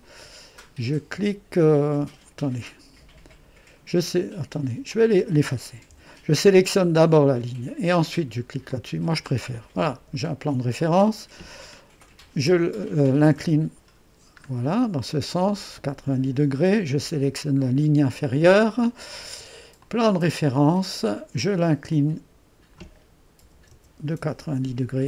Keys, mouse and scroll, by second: 2.5 Escape, 4.9 click, 6.0 Delete, 7.1-12.2 drag, 12.2-12.5 typing, 13.4 Return, 15.5-16.6 drag, 17.3-20.5 drag, 21.9-23.5 drag, 23.5 typing, 24.3 Return.